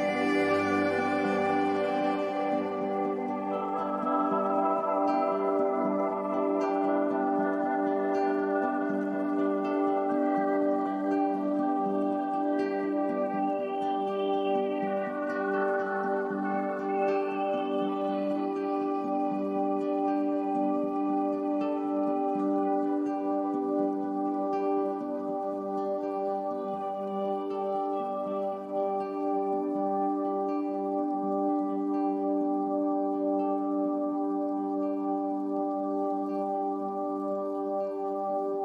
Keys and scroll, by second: 6.8 a, 11.7 super+j, 27.0 i, 29.0 v.